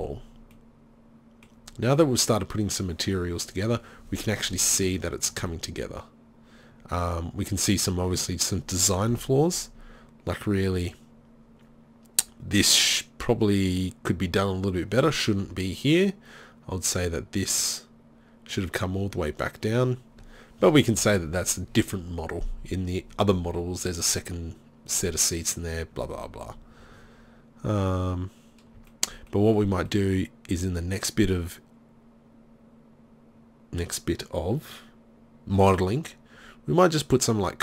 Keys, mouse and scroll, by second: 9.2 KP_3, 27.6 middle click, 31.1-31.8 middle drag.